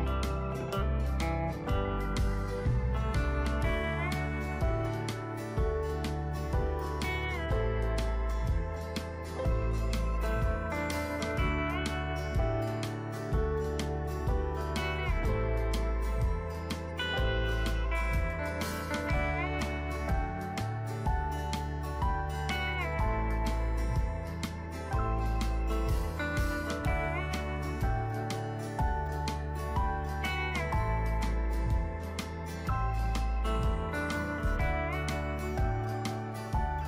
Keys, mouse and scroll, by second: 8.6 alt+shift+click, 11.4-27.6 drag, 29.5-36.8 alt+shift+drag.